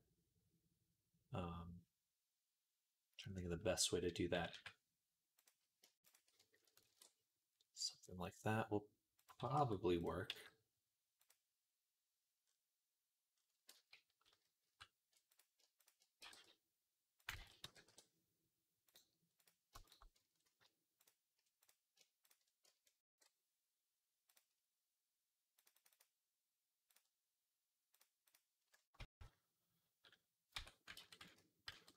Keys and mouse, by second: 4.2 g, 5.9 click, 6.7 ctrl+b, 9.4 Tab, 10.1 g, 13.5 ctrl+z, 13.8 ctrl+z, 15.0 ctrl+z, 16.0 g, 17.2 ctrl+z, 17.5 e, 22.9 ctrl+b, 25.4-30.4 drag, 28.8 Tab, 30.4 Tab, 30.8 ctrl+z, 31.0 ctrl+z.